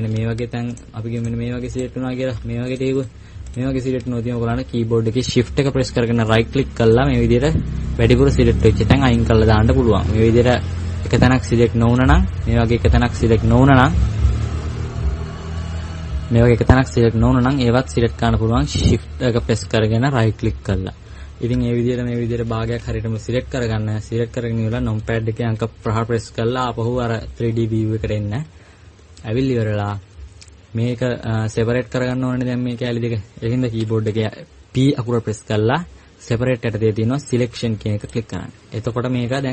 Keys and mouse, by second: 11.0-12.0 drag, 12.2 click, 17.0 middle click, 21.3 middle click, 22.3 KP_Subtract, 22.5 KP_Subtract, 22.6 KP_Subtract, 22.8 KP_Subtract, 24.2-25.9 middle drag, 25.9 KP_5, 26.6 middle click.